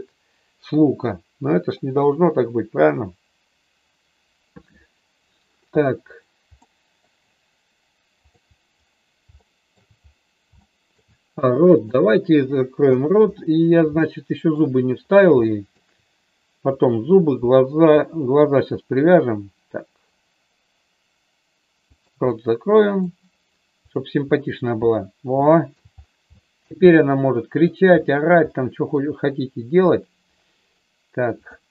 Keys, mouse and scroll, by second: 6.6 middle click, 9.4 shift+middle click, 10.6 shift+middle click, 11.7 click, 12.4 KP_4, 12.9 KP_3, 14.0 shift+middle click, 15.4 shift+middle click, 16.7-18.1 drag, 18.1 r, 22.3 middle click, 23.8 click, 25.5 shift+middle click, 26.3 shift+middle click, 26.9 middle click, 28.5 middle click, 31.4 click.